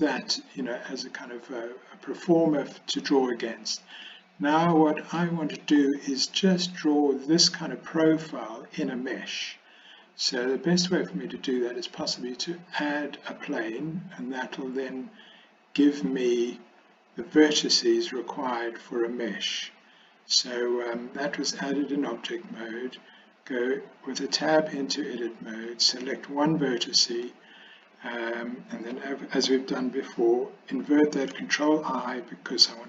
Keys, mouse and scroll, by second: 4.0 click, 5.3 middle click, 11.6-13.6 drag, 23.6 Tab, 25.8 click, 31.4 ctrl+i.